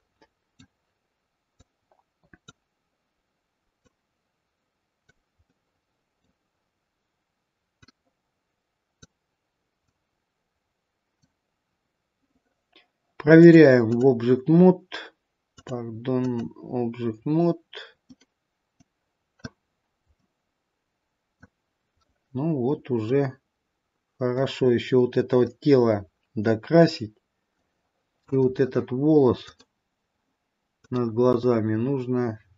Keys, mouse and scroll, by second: 0.1 middle click, 2.1 click, 4.2 click, 5.6 middle click, 8.2 click, 10.3 click, 13.3 click, 15.7 click, 17.5-18.4 scroll up 1, 18.4 middle click, 18.4-18.8 scroll up 2, 20.0 scroll down 1, 20.3 middle click, 23.2 middle click, 25.8 middle click, 29.3 click.